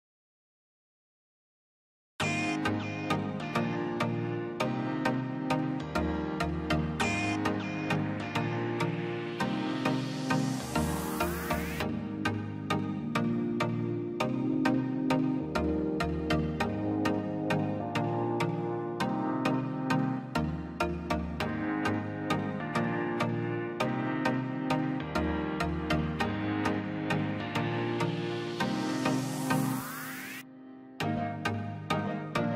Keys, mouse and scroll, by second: 0.0 click, 0.8 space, 0.9 scroll down 1, 1.2 middle click, 2.0 click, 2.3-2.6 scroll up 1, 4.7 p, 6.6-7.5 scroll up 1, 7.6 middle click, 8.4-8.9 scroll up 1, 9.1 space, 9.2 click, 9.4-9.8 scroll up 1, 9.8 p, 9.9-11.7 drag, 11.7-12.0 scroll up 1, 13.2 middle click, 13.5 scroll up 1, 13.7-15.3 drag, 15.3-16.6 drag, 16.6-17.0 scroll up 1, 17.6 click, 18.5 click, 19.7 scroll down 1, 19.9 click, 21.0 scroll down 1, 22.1 click, 22.6-22.9 scroll down 1, 22.9 click, 23.3 scroll down 1, 23.5 middle click, 24.5-25.1 scroll up 1, 25.1 click, 25.9 click, 26.3 scroll down 1, 26.8 click, 27.1-27.5 scroll down 1, 27.5 middle click, 28.0 scroll down 1, 28.3-30.6 middle drag, 30.6 middle click, 31.1 scroll down 1, 31.6 middle click, 32.1 scroll down 1.